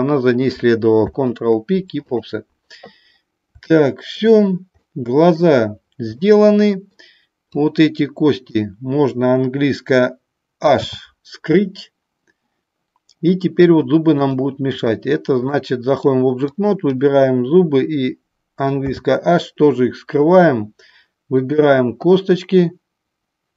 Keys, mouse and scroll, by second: 7.6 click, 14.4 click, 16.6 click, 21.3 click.